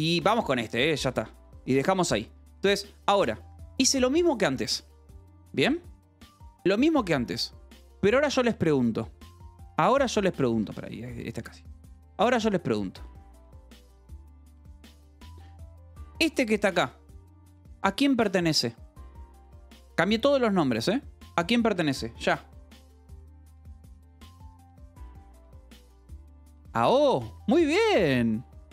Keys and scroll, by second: 0.0-3.0 typing, 8.6 k, 9.5 h, 10.4 a, 11.4 Escape, 11.7-17.8 typing, 22.1 Escape.